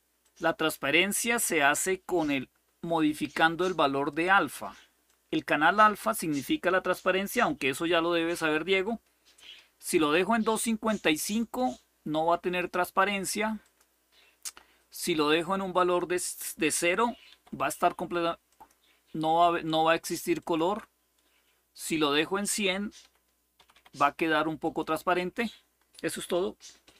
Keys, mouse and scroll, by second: 0.0 click, 4.8-5.9 drag, 9.0-10.3 typing, 11.1 click, 13.4 click, 15.0-16.2 drag, 17.0 typing, 18.2 click, 20.1 click, 21.7 click, 22.6-24.0 typing, 22.7 click, 24.4 click.